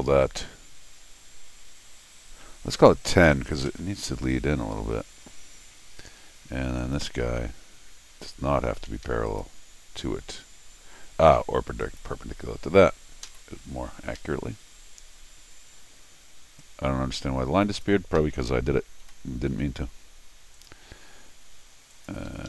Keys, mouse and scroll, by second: 5.6 scroll down 2, 6.1 Escape, 6.8 click, 8.7 Escape, 8.9 Escape, 9.0 Escape, 9.3 click, 11.8 click, 14.2 Escape, 16.6-17.8 drag, 18.2 Escape, 19.0 l, 20.5 click, 21.9 click, 22.3 Escape.